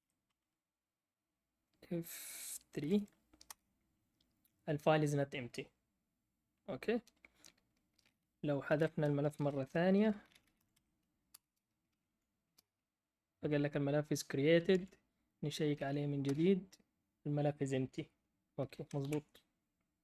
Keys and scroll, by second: 0.0-0.4 typing, 2.5-3.4 typing, 8.4-11.2 typing, 12.3-13.0 typing, 16.0-16.7 typing, 19.0 ctrl+l.